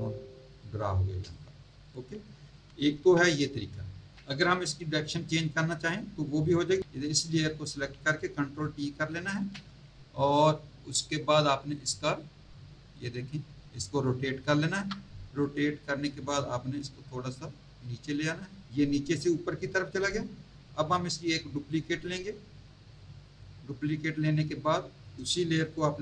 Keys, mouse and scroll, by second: 0.5 click, 1.3 alt+click, 1.8 alt+click, 2.4 Tab, 7.0 click, 9.1 ctrl+t, 11.3 click, 15.4 click, 20.0 click, 21.7 click, 24.2-24.6 scroll up 1, 25.8 ctrl+t.